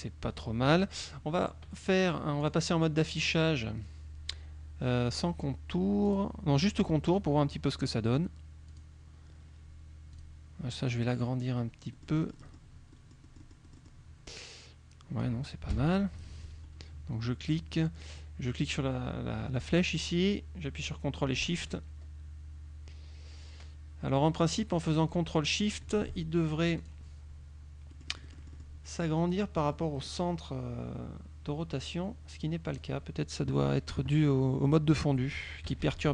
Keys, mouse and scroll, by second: 2.5 click, 6.1 click, 7.5 middle click, 8.7 click, 10.2 click, 12.1 middle click, 13.1-14.2 middle drag, 15.8 KP_3, 16.3 KP_Subtract, 17.6 click, 20.4-26.1 drag, 26.9 click, 28.0 click, 31.9-33.1 drag, 35.7 KP_Subtract.